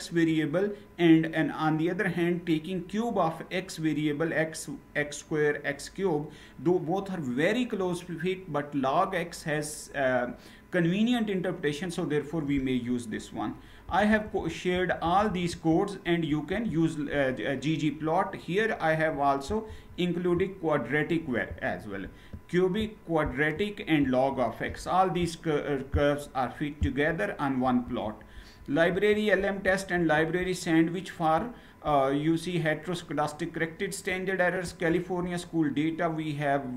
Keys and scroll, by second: 13.5 Down, 13.8 Down, 14.1 Down, 14.5 Down, 14.7 Down, 15.0 Down, 15.2 Down, 16.2 ctrl+Return, 27.5 ctrl+Return, 28.6 ctrl+Return, 29.6 ctrl+Return, 34.3 ctrl+Return.